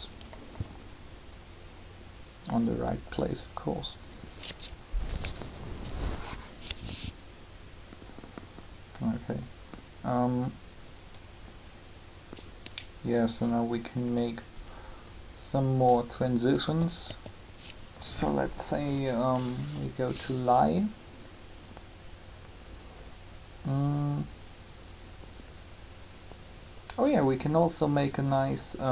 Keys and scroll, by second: 5.5 3, 16.6-17.0 typing.